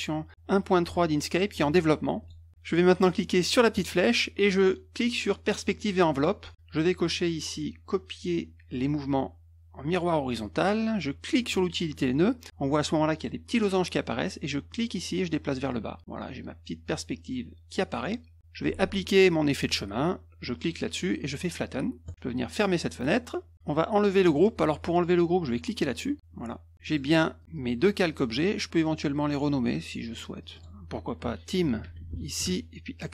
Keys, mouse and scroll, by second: 2.2 click, 3.7 click, 5.7 click, 9.9 click, 11.4 click, 14.7-18.0 drag, 20.5 click, 22.0 click, 22.9 click, 26.8 click, 27.4 click, 27.5 click, 28.1 click, 29.3 click, 30.4 click, 30.5 click, 31.8 typing, 32.4 Return.